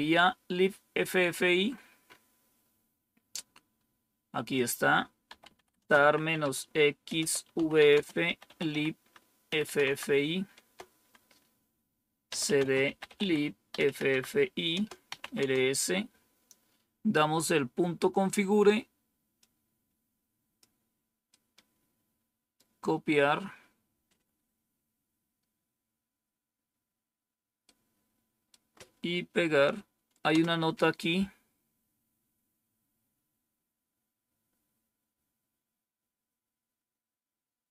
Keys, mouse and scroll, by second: 1.1-4.4 scroll up 1, 4.4 click, 4.9-9.5 typing, 9.7 Tab, 10.5 Tab, 12.1-15.6 typing, 19.2-20.5 drag, 21.2-22.5 right drag, 25.0-25.7 scroll down 1, 27.5 right click, 30.2 Return, 37.3-37.7 scroll down 3.